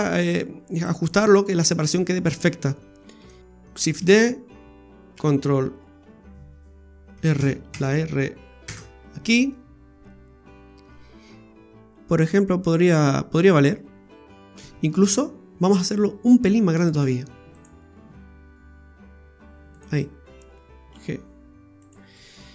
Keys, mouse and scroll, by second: 3.2 s, 3.9 shift+d, 5.1 r, 9.5 scroll up 4, 15.1 ctrl+z, 15.7 ctrl+z, 16.9 shift+s, 17.9 s, 20.9 g.